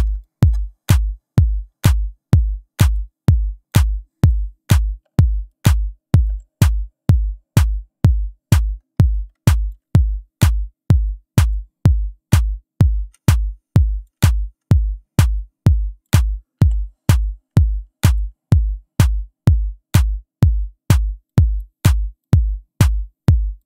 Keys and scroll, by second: 5.1 Delete, 6.3 Delete, 13.0 ctrl+z, 16.6 Delete.